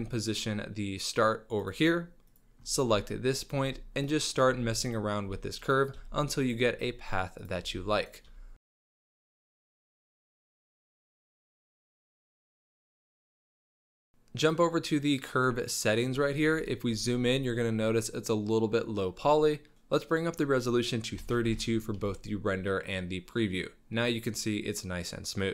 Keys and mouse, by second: 2.9-13.5 typing, 8.7 shift+click, 13.9 Tab, 16.7 shift+click, 17.0-18.1 middle drag, 20.1-22.1 drag.